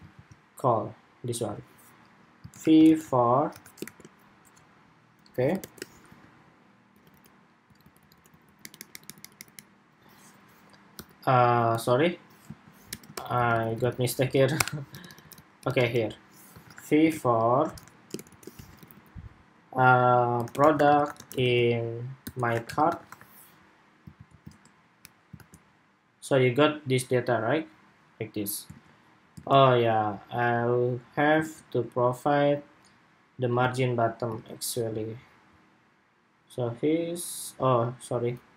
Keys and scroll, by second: 0.0 super+s, 24.0 super+s, 24.4 super+Tab, 25.2 super+r, 28.4 super+Tab, 29.1 super+Tab, 31.1 super+Tab, 33.4 super+Tab, 34.1 super+Tab.